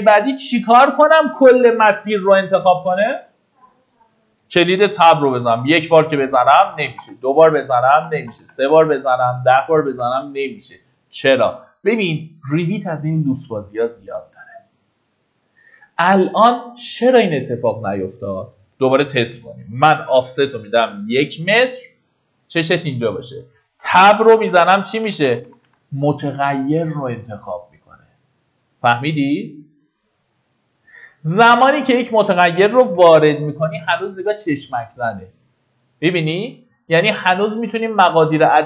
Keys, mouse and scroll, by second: 5.2 Tab, 9.1 Tab, 15.9 middle click, 18.2 click, 20.1 KP_1, 24.3 Tab, 31.2 click, 32.6 KP_1.